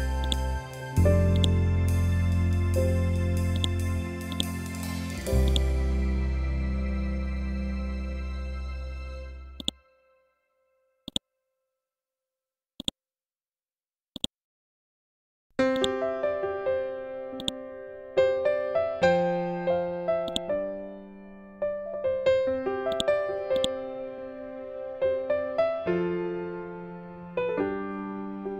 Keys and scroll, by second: 0.8 ctrl+g, 3.8 c, 4.1 e, 6.2 Up.